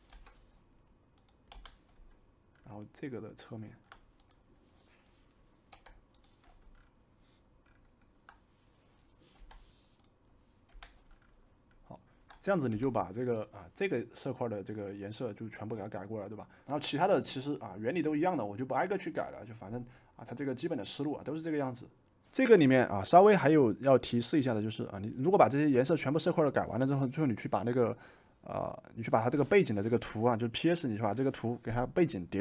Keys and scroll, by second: 0.0 i, 1.5 v, 5.7 y, 9.3 i, 10.7 v, 12.7 v.